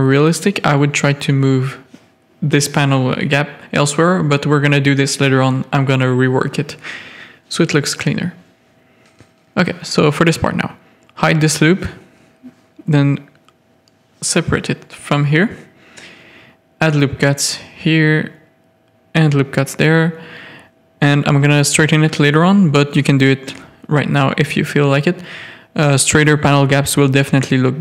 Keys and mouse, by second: 0.4 Tab, 1.2 Tab, 1.7 alt+a, 2.0 z, 2.8 click, 3.2 z, 3.3 click, 3.9 Tab, 5.0 ctrl+r, 6.7-7.1 middle drag, 7.2 Tab, 7.6 alt+a, 8.1 middle drag, 8.5 Tab, 9.3 3, 9.9 alt+click, 10.9 h, 12.4 l, 13.2 click, 15.0 alt+h, 15.6 Tab, 16.6 Tab, 16.9 1, 17.3 ctrl+r, 19.0 Tab, 19.1 click, 19.3 Tab, 19.8 ctrl+r, 21.0 Tab, 21.4 alt+a, 22.0 Tab, 22.9 ctrl+r, 24.9 Tab, 25.5 KP_3, 25.9 alt+a, 26.1-26.4 drag, 26.5 z.